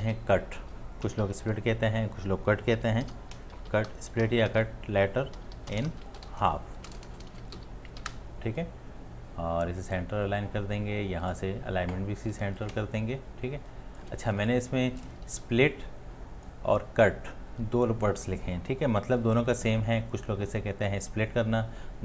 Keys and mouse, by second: 0.0 t, 1.2 shift+0, 3.1-4.3 typing, 5.7-7.4 typing, 8.0 Escape, 12.7 alt+click, 12.9-14.0 shift+click, 13.2 shift+click, 15.8 t.